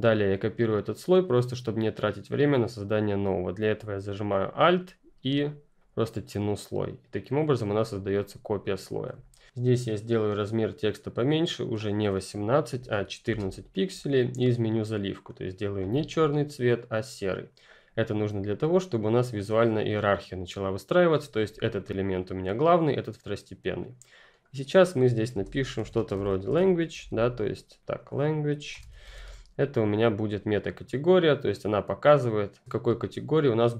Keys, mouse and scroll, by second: 5.7 alt+click, 11.4 click, 12.5-13.3 typing, 14.8 click, 16.3 click, 19.0 click, 21.4 ctrl+click, 25.3-29.6 typing, 27.7 click, 29.7 click.